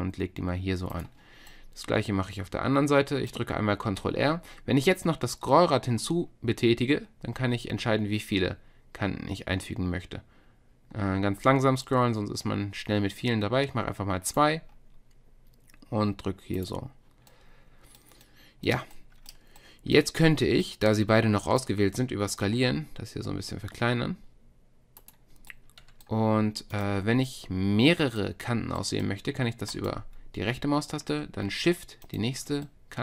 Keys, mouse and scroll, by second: 1.6-3.9 middle drag, 3.9 ctrl+r, 22.5 s, 26.7-28.8 middle drag, 29.8-33.0 middle drag.